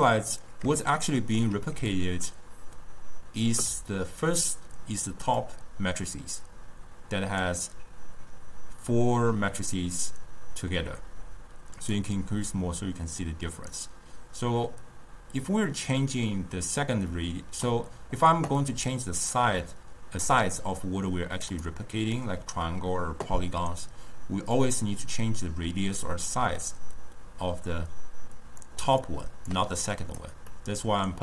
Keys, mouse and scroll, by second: 1.8 d, 2.0-3.5 drag, 3.5 d, 3.6 d, 5.5 click, 11.9-17.5 drag, 18.8 d, 19.0 right click, 19.5 d, 20.3 d, 20.5-21.5 drag, 21.5 d, 21.7 right click, 22.2 d, 22.4 d, 24.7-27.7 drag, 29.1-30.0 drag, 30.6 scroll up 1, 30.6-31.2 middle drag.